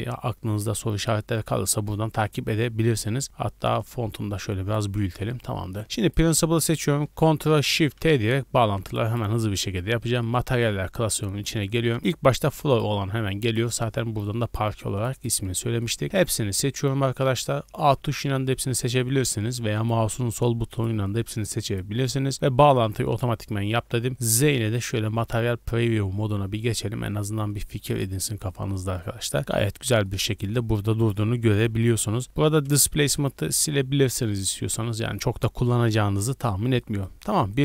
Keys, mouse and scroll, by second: 0.7 n, 1.7 n, 3.8 click, 5.0 n, 5.7 click, 7.0 click, 7.8 ctrl+shift+t, 22.3 scroll down 4, 22.6 middle click, 23.4 z, 24.6-25.0 scroll up 3, 27.6 middle click, 27.6-28.1 scroll up 3, 28.2-29.5 middle drag, 29.8 scroll down 1, 30.0 middle click, 30.2-30.6 scroll up 1, 30.7 click, 31.9-34.4 typing, 33.1 click, 34.2 click, 34.7 middle click, 35.1 scroll up 1, 36.4 scroll down 1, 36.8-37.1 middle drag, 37.5 right click.